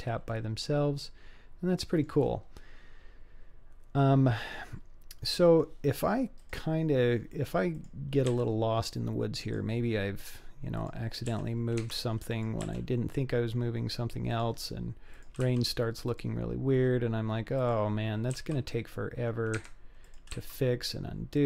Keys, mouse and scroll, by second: 0.3-2.1 middle drag, 2.6-4.4 scroll down 2, 4.9-5.4 scroll down 2, 5.3-5.6 middle drag, 6.4 drag, 6.8-7.3 scroll down 2, 7.7 click, 8.3 g, 10.8 click, 11.3 g, 12.3 click, 12.7 g, 15.1 click, 15.5 r, 16.8-17.6 scroll up 2, 17.6 click, 17.6 scroll up 1, 18.3 r, 20.1 click, 20.4 r.